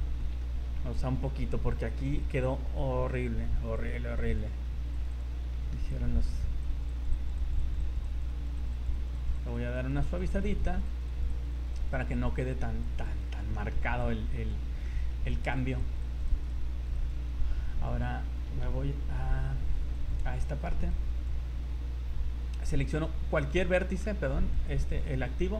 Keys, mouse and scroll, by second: 0.2 z, 0.4 middle click, 0.8 scroll down 2, 1.7 scroll up 3, 3.1 click, 3.8 click, 4.6 scroll up 1, 4.9 click, 5.1 click, 5.3 scroll down 4, 5.5 middle click, 5.9 click, 6.3 scroll up 3, 6.6 click, 6.9 click, 7.3 click, 7.5 click, 7.7 click, 7.9 click, 8.1 click, 8.3 click, 8.7 click, 8.9 click, 9.1 click, 9.3 click, 9.5 click, 9.7 click, 9.9 click, 10.1 click, 10.3 click, 10.5 click, 10.7 click, 10.9 click, 11.1 click, 11.3 click, 11.7 click, 11.9 click, 12.1 click, 12.3 click, 12.4 middle click, 12.8 click, 13.2 click, 13.4 click, 13.5 middle click, 14.0 click, 14.8 middle click, 15.3 click, 15.7 click, 15.9 click, 16.1 click, 16.3 click, 16.5 click, 17.1 click, 17.4 scroll down 3, 18.7 v, 19.9 click, 20.9 click, 21.8-22.3 scroll up 5, 23.4 shift+right click, 23.8 middle click, 24.5 shift+right click, 24.9 scroll up 2, 25.5 scroll up 1.